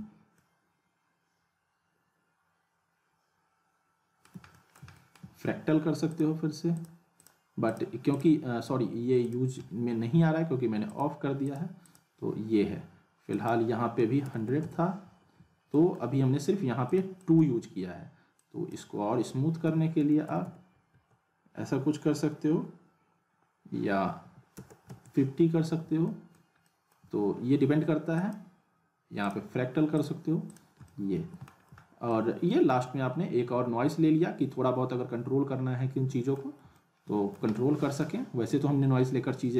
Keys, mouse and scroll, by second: 0.4-4.4 alt+middle drag, 6.1 click, 15.7 alt+middle click, 16.9-19.0 drag, 25.8 click, 26.1 alt+middle click, 28.1 click, 30.9-31.5 alt+middle click, 31.6-32.0 scroll down 1, 32.1-32.7 alt+middle drag, 39.1-39.5 alt+middle drag.